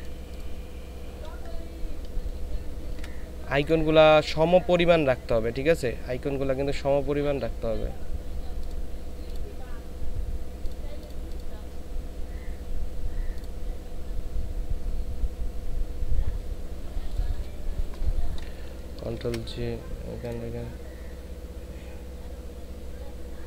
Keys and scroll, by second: 19.1 ctrl+j.